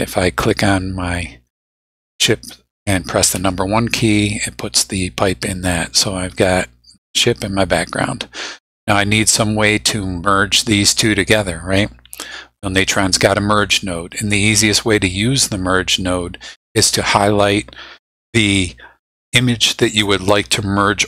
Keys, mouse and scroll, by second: 0.4 click, 3.4 1, 6.4-7.6 drag, 9.4-10.1 drag, 12.9-14.7 drag, 17.1 click.